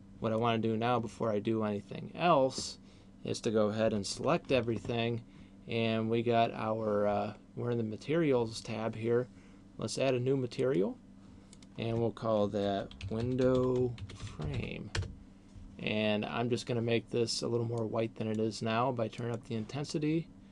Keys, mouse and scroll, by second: 4.0 a, 10.8 click, 11.8 click, 16.0-16.5 scroll down 2, 17.8 click, 19.0 click.